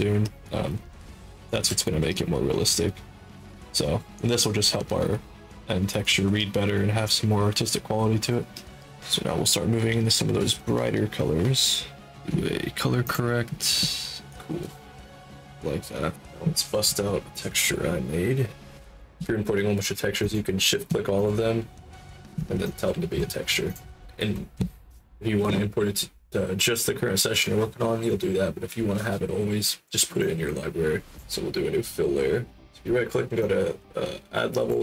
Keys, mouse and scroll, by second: 0.3 click, 0.7 alt+click, 1.3 ctrl+alt+click, 1.7 alt+click, 2.2 click, 2.8 click, 3.8 click, 4.2 click, 5.0 ctrl+alt+click, 5.5 ctrl+alt+click, 5.9 alt+click, 6.4 click, 8.1 click, 8.6 click, 10.0 click, 10.5 click, 13.0 click, 18.7 click, 20.2 shift+click, 21.1 click, 22.6 click, 23.6 click, 30.1 click, 33.3-34.6 drag.